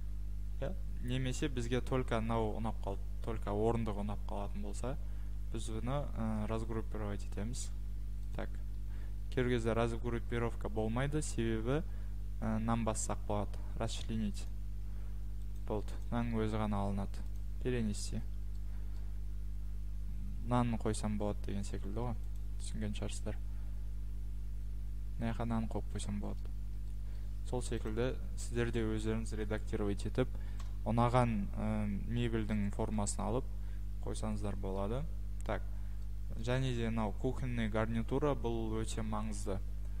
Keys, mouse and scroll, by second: 1.4 click, 6.5 click, 8.3 click, 14.5 click, 15.6 click, 16.0 click, 17.4 click, 18.1 click, 18.5 middle click, 18.9 middle click, 19.0 middle click, 19.4 middle click, 20.3-21.4 scroll, 22.4 click, 23.2-23.7 scroll, 26.0-27.6 scroll, 26.6 Escape, 27.9 click, 28.5 click, 30.6 Delete, 32.1 scroll, 33.4-34.0 scroll, 34.8 scroll, 36.4 scroll, 37.0-37.5 scroll, 38.8-40.0 scroll.